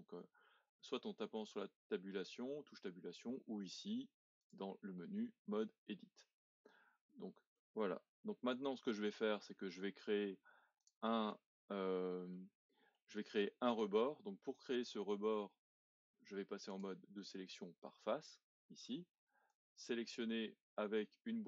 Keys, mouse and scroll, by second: 4.4-6.7 drag, 6.7-7.5 scroll up 1, 7.5-10.8 middle drag, 10.8 click, 11.3-16.0 shift+middle drag, 16.7 click, 19.5 click.